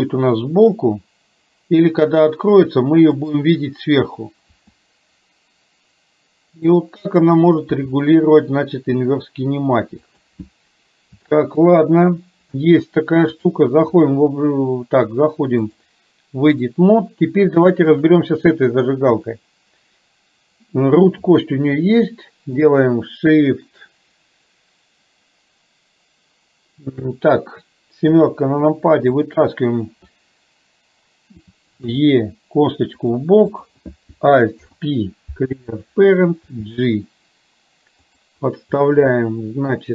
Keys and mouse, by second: 4.6 r, 7.7 r, 11.3 shift+middle click, 13.5 click, 15.8-16.8 drag, 17.6 shift+middle click, 19.2 click, 28.2 KP_7, 32.0 e, 34.7 alt+p, 36.5 g, 38.8 middle click.